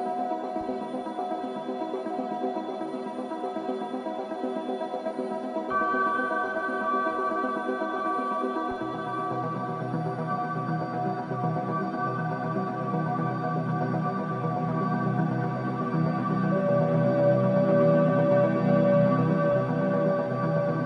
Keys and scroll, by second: 7.2 ], 8.1 ], 9.1-11.2 typing, 16.1 ctrl+z, 17.2 ].